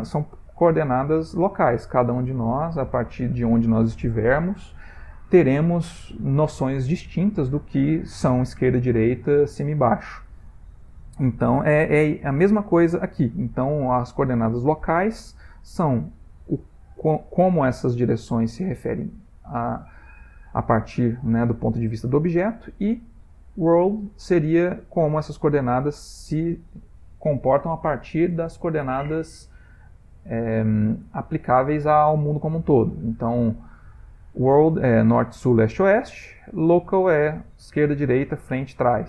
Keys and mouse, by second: 23.2 click, 24.4 click, 26.2 click, 29.2 ctrl+middle click, 29.3 ctrl+middle click, 29.5 ctrl+middle click, 30.4 ctrl+middle click, 32.3 ctrl+middle click, 33.7 click.